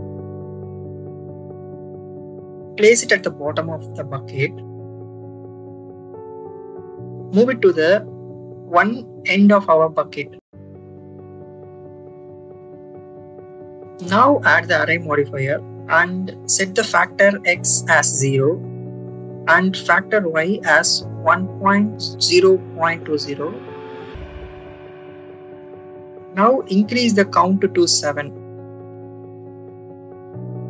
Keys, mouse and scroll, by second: 0.2-1.8 drag, 2.8-3.8 drag, 4.6-6.4 drag, 7.5 click, 8.8 click, 10.7-13.1 drag, 14.1-15.2 drag, 16.7-18.8 drag, 19.0 click, 19.3 click, 19.5 click, 19.8 click, 20.1 click, 20.3-24.5 drag, 24.7 click, 26.8 click, 27.1 click, 27.4 click, 27.7 click, 28.3 click.